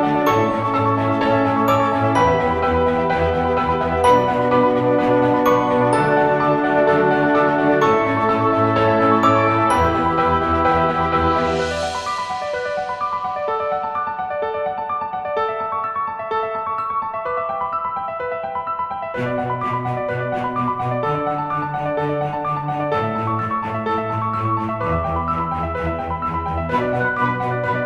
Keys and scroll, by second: 0.0-1.5 typing, 5.6 typing, 8.9 ], 10.3-22.3 typing, 23.6-25.9 typing.